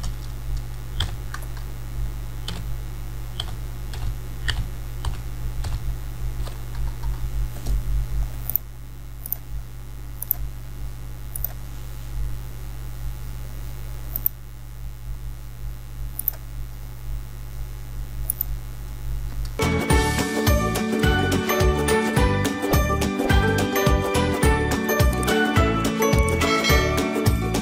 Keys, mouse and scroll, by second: 8.5 click, 14.2 click, 20.0 click, 20.1 alt+right click, 20.2 click, 20.8 alt+scroll up 1, 20.8 scroll down 1, 20.9 alt+scroll up 1, 21.0 alt+right click, 21.1 click, 22.0 alt+scroll up 1, 22.1 alt+right click, 22.2 click, 22.5-22.8 alt+scroll down 2, 22.7 click, 22.8 scroll up 2, 22.9 click, 23.3 alt+scroll down 1, 23.4 click, 24.7 ctrl+z, 25.0 click, 25.4 ctrl+z, 25.6 click, 25.9 alt+scroll up 1, 26.1 alt+right click, 26.2 alt+click, 26.3 ctrl+z, 26.5-27.0 alt+scroll up 2, 27.4 click, 27.5 alt+click.